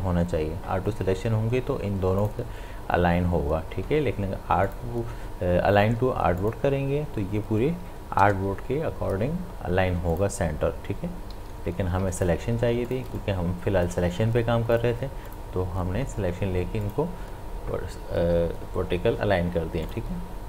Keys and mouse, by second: 2.2 click, 4.7 click, 10.1 click, 11.3 ctrl+z, 12.0 space, 12.2 ctrl+click, 12.7 ctrl+space, 12.9 ctrl+click, 13.6 space, 14.8 click, 19.9 click.